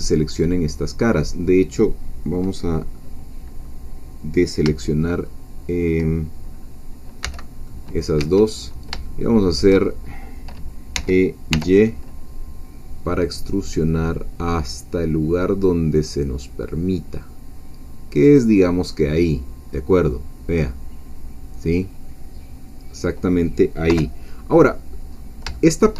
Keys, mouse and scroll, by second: 0.0 scroll down 2, 0.1-4.6 middle drag, 5.1 shift+middle click, 6.5-6.8 scroll up 2, 7.2 c, 7.7 middle click, 8.2 Escape, 8.7 scroll down 1, 9.1 shift+middle click, 9.8-10.2 shift+scroll down 1, 11.0 e, 11.5 y, 18.3 click, 18.7-19.4 scroll down 1, 19.6-20.1 scroll down 1, 20.1-23.9 middle drag, 23.9 3, 25.1-25.4 scroll up 2, 25.5 shift+middle click.